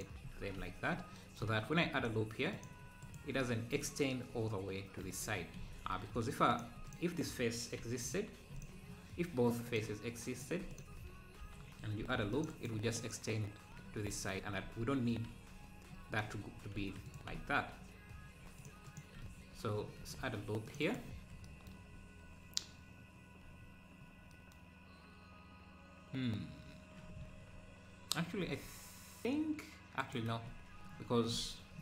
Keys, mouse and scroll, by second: 0.0 x, 0.4 z, 1.8 ctrl+r, 5.6 ctrl+z, 6.6 click, 6.9 shift+click, 8.1 click, 8.6 shift+click, 9.7 click, 11.4 f, 12.0 ctrl+r, 14.7 ctrl+z, 16.3-16.8 scroll up 2, 17.2 x, 18.7 Left, 19.0 Left, 19.8-20.2 scroll down 3, 20.2 ctrl+r, 23.7-24.5 scroll up 2, 28.4 ctrl+r.